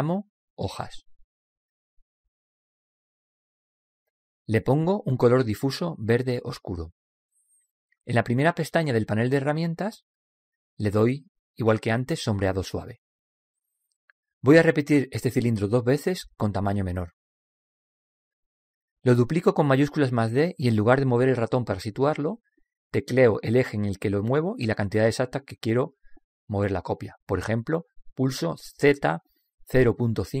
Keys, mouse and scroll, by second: 3.3-6.8 drag, 13.3 click, 20.7 shift+d.